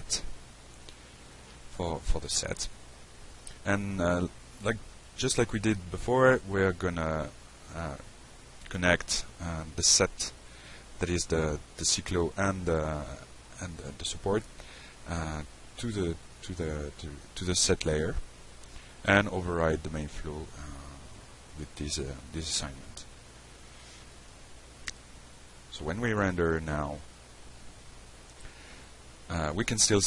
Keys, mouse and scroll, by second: 1.9 click, 2.4 click, 2.9 click, 3.4-6.3 typing, 7.3 click, 8.4 click, 10.2 click, 10.7-11.2 alt+middle drag, 12.8 click, 13.4 shift+click, 15.3 click, 16.3 drag, 16.8 click, 17.3-18.4 shift+drag, 19.2 click, 20.2-20.9 shift+drag, 21.3-21.6 alt+middle drag, 22.5 drag, 23.2-23.6 drag, 23.9-25.0 shift+drag, 25.4 click, 26.1-26.8 drag, 27.7 click, 28.6 click, 29.2 click, 29.7 middle click.